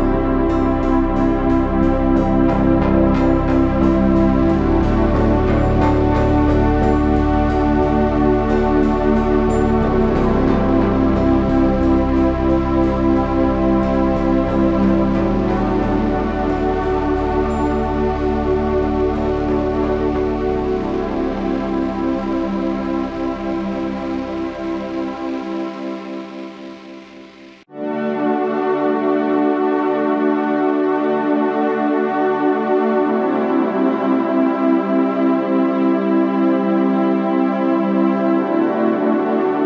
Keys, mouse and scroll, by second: 4.9 s, 7.2-8.4 drag, 9.1 e, 10.4 s, 12.8-17.5 drag, 21.5 e, 23.5 s, 29.4 s, 36.5 s, 38.2 e.